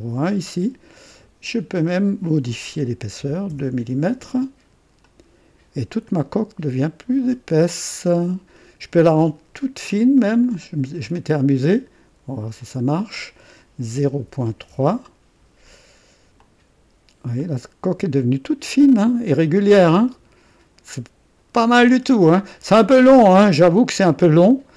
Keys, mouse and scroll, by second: 0.5 right click, 1.7 click, 3.1 KP_2, 3.5 Return, 5.0 click, 5.9-9.5 drag, 10.4 click, 10.4-10.9 typing, 12.6 click, 13.9 KP_0, 14.2 KP_Decimal, 14.6 KP_3, 14.7 Return, 15.8 typing, 16.3 click, 17.4-23.4 drag, 21.1-22.0 typing, 23.6 scroll down 2, 24.3-24.7 drag.